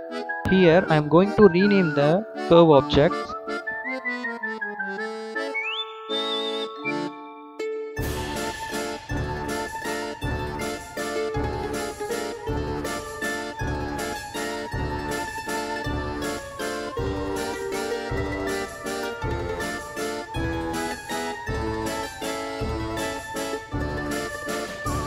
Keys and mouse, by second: 0.5-2.2 drag, 2.3 click, 2.4-3.9 drag, 4.5-5.8 drag, 6.2-7.4 drag, 7.7 a, 8.0 ctrl+z, 8.1 click, 8.6 click, 8.8 ctrl+z, 9.0-9.3 right drag, 9.6 click, 10.6 click, 10.8 click, 11.1 ctrl+z, 11.5-12.3 drag, 13.0 s, 14.1 click, 14.2 click, 15.0-16.2 drag, 17.1 click, 18.3 s, 20.5 click, 21.7 s, 23.3 click, 24.1 click.